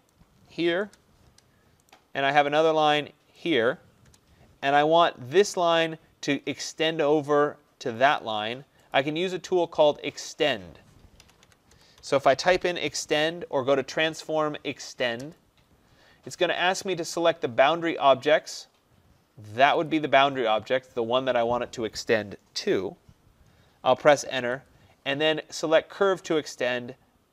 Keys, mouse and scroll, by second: 0.2 click, 0.9 Return, 2.0 right click, 2.6 click, 3.6 click, 4.1 Return, 5.8 click, 8.2 click, 9.0 click, 11.3-12.9 typing, 15.2 Return, 20.0 click, 24.4 Return.